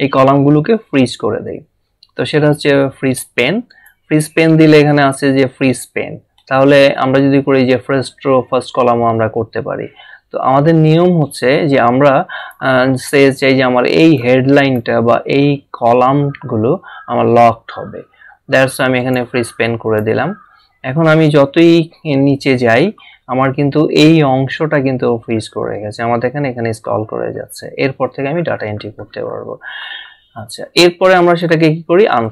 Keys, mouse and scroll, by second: 3.7 click, 12.4 click, 19.0 click, 21.2 scroll down 1, 23.1-24.3 scroll down 1, 24.9 scroll down 1, 30.8 scroll up 1.